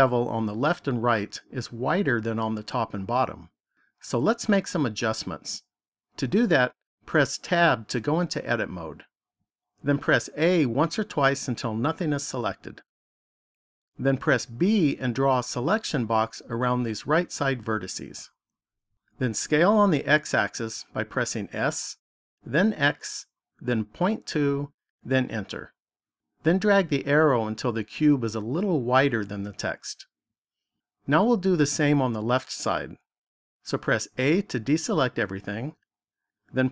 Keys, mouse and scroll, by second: 7.4 Tab, 10.3 a, 11.2 a, 14.5 b, 21.3 s, 27.8 click, 34.0 a.